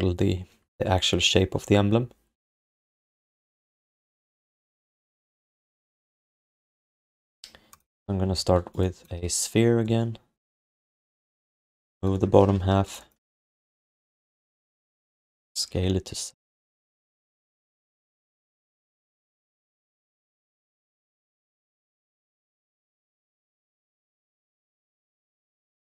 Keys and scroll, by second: 9.1 w, 11.2 q, 13.8-16.5 typing, 20.6 w, 23.5 r.